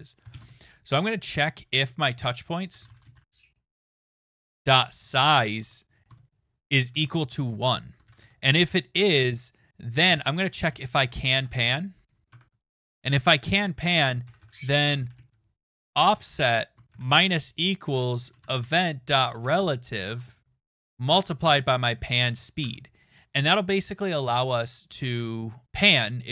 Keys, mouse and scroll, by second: 0.0-0.8 typing, 2.4-8.5 typing, 9.8-12.0 typing, 12.2 Tab, 13.9-15.4 typing, 16.6-17.5 typing, 19.0-22.5 typing, 25.1-25.5 scroll.